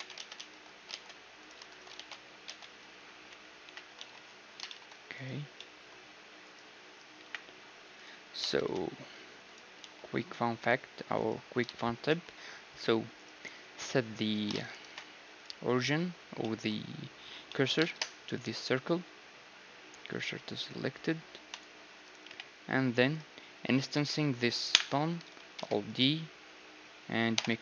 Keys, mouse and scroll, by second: 0.1 Tab, 0.1 ctrl+z, 0.9 ctrl+Tab, 0.9 ctrl+z, 1.7-3.5 right drag, 1.9 ctrl+x, 2.9 Tab, 3.2 KP_Divide, 3.6 KP_1, 4.0 z, 5.2-6.5 drag, 5.2-6.5 right drag, 7.4 KP_1, 8.5 shift+s, 9.8 z, 10.4 z, 12.0-15.4 right drag, 14.8 ctrl+alt+shift+c, 16.1-21.1 middle drag, 17.9 shift+s, 21.9-23.2 middle drag, 22.3 KP_1, 23.2-25.6 right drag, 23.9 click, 24.7 KP_1, 25.6 alt+d, 25.6 middle click, 27.4 ..